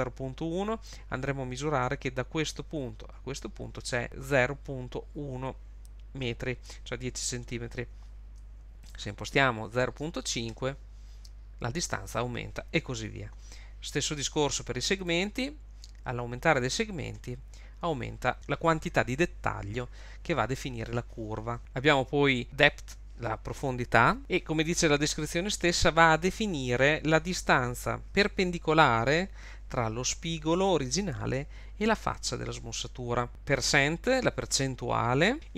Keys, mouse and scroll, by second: 8.8 click, 15.0 click, 21.6 click, 33.3 click, 35.3 click.